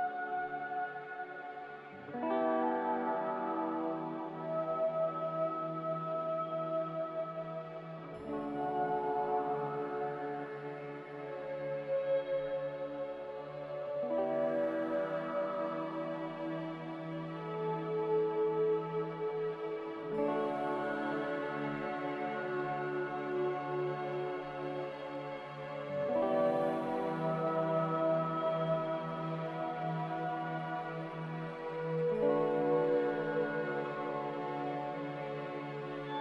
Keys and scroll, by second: 0.0 m, 6.3 a, 23.4 x, 25.6 ctrl+z, 29.8 g, 31.2-32.1 typing.